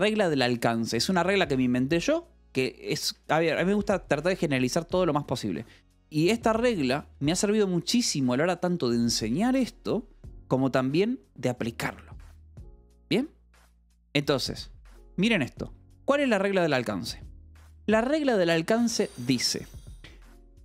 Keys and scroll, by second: 3.5 Escape, 15.0 Escape.